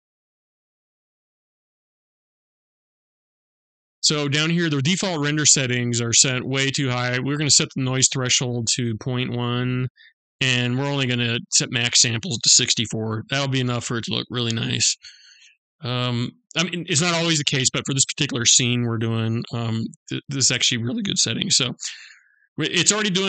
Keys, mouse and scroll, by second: 0.6 click, 1.6 click, 3.6 scroll down 2, 6.6 click, 11.0 click.